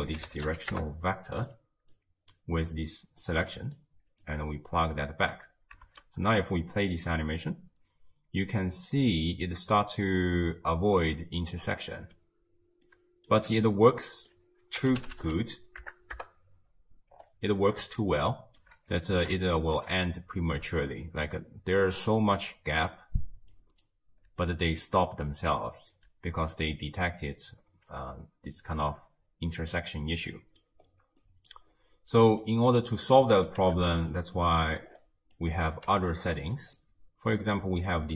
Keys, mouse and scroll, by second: 1.9 click, 2.7 drag, 3.5 click, 4.2 drag, 5.9 shift+space, 12.0 space, 12.9-14.2 middle drag, 14.2-15.2 drag, 15.2 0, 15.3 0, 17.1-17.8 scroll up 4, 18.0-18.9 shift+middle drag, 18.9 scroll up 2, 19.5-20.6 shift+middle drag, 20.6-21.7 d, 21.9 click, 22.2-24.1 d, 22.6 click, 22.8 d, 23.6 click, 23.8 d, 25.3 d, 25.5 right click, 25.9 d, 26.0 d, 27.0 d, 30.3 middle click, 30.9-31.2 scroll down 4, 31.2 middle click, 31.7-32.3 scroll down 1, 32.3 scroll down 2, 32.4 click, 33.6 g, 34.4 middle click, 34.6-35.4 scroll up 7, 35.4 click, 35.9 g, 36.8-38.1 middle drag.